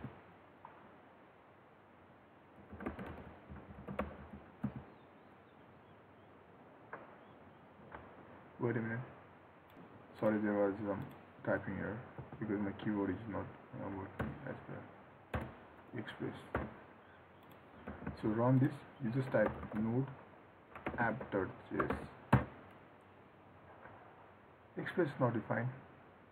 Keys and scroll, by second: 18.1 ctrl+s.